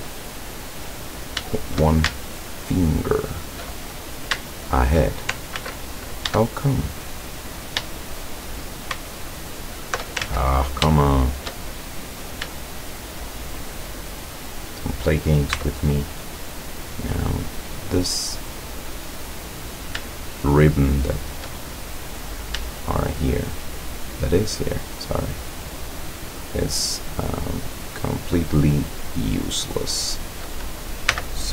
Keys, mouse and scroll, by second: 0.5-1.0 scroll up 1, 1.2 right click, 2.3 alt+shift+right click, 2.8 alt+shift+right click, 3.2 alt+shift+right click, 3.8 alt+shift+right click, 4.4 alt+shift+right click, 5.6 ctrl+z, 6.6 shift+right click, 8.1 shift+right click, 9.1 alt+shift+right click, 9.5 alt+shift+right click, 10.3 ctrl+alt+shift+z, 11.0 shift+right click, 11.6-12.5 shift+middle drag, 12.9 shift+right click, 13.6 shift+right click, 14.5 shift+right click, 15.6 x, 16.2 click, 17.6 right click, 18.4 right click, 19.7 right click, 20.5 shift+right click, 21.1 shift+right click, 21.7 shift+middle click, 23.5 shift+right click, 24.5 shift+right click, 25.8 shift+right click, 26.4 shift+right click, 27.7 shift+right click, 29.2 shift+right click, 30.0 shift+right click, 31.1 x.